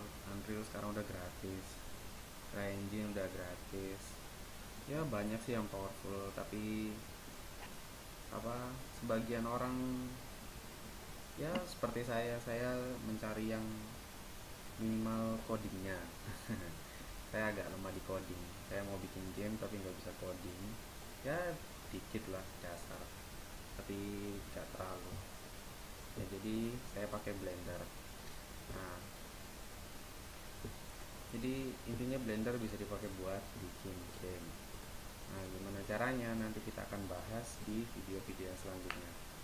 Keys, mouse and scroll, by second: 18.0-24.9 right drag, 26.6-30.6 right drag, 32.7-39.4 right drag.